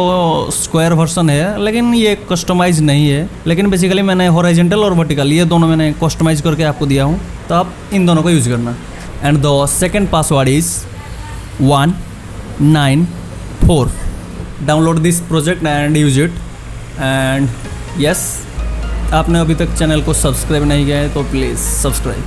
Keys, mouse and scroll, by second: 4.3 click, 11.1 click.